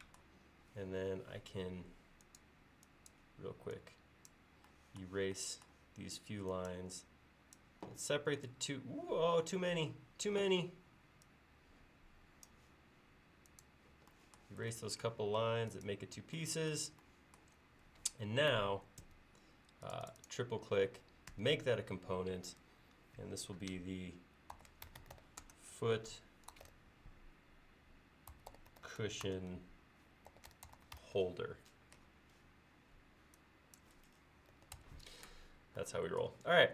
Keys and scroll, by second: 1.6 e, 19.0 space, 21.4 g, 24.3-31.5 typing, 34.6 typing, 34.8 Return.